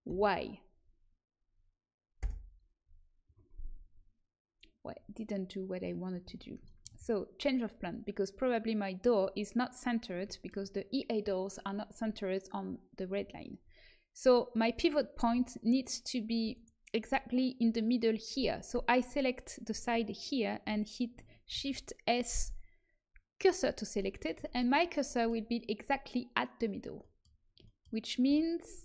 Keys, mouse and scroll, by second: 6.0 ctrl+z, 9.6-13.2 middle drag, 16.5-19.0 right drag, 17.5-19.4 middle drag, 21.5 shift+s, 28.2 a, 28.7 a.